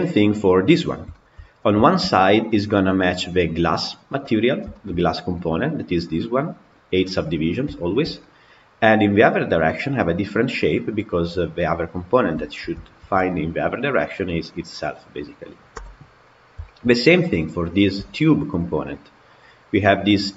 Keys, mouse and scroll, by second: 0.2-0.6 scroll up 1, 0.6 click, 0.9-1.5 scroll up 3, 1.0-1.3 shift+middle drag, 1.7-3.8 shift+middle drag, 3.8 click, 4.6-11.0 shift+middle drag, 11.0 click, 11.4-12.0 middle drag, 12.0 scroll up 1, 12.2-12.9 shift+middle drag, 12.9 shift+d, 15.6 Delete, 16.1-16.5 scroll down 3, 16.5 shift+middle click, 17.1 click, 17.8 KP_Decimal, 18.8 middle click, 19.5 click.